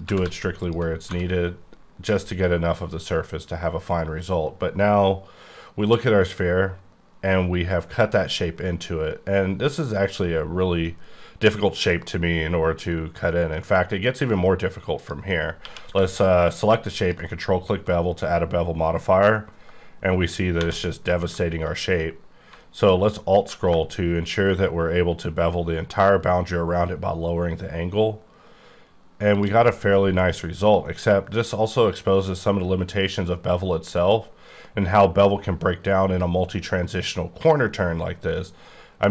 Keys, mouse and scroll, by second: 0.1 g, 0.2 g, 0.6 click, 1.9 scroll down 2, 15.0 click, 15.6 q, 17.0 ctrl+click, 19.9-20.6 scroll up 3, 20.6 1, 22.8-23.6 alt+scroll down 5, 29.4 shift+click, 29.6 scroll down 1.